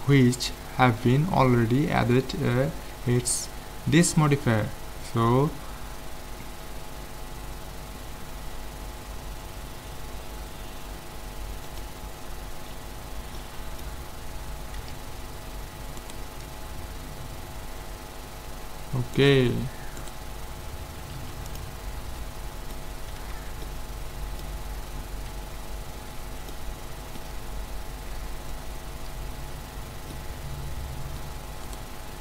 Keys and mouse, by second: 6.9 ctrl+l, 12.7 z, 13.4-15.9 drag, 14.8 a, 16.0-17.7 right drag, 19.2-21.8 right drag, 21.1 ctrl+s, 22.2-26.4 middle drag, 23.2 a, 27.3 z, 31.7-32.2 right drag.